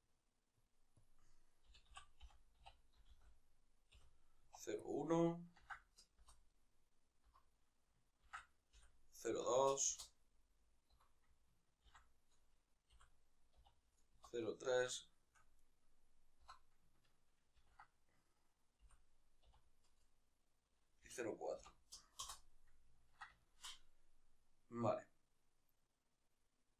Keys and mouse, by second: 6.2-9.6 right drag, 9.6 F2, 9.9-13.9 right drag, 13.9 F2, 14.7-15.3 shift+middle drag, 15.3-21.9 right drag, 22.7-26.7 ctrl+middle drag.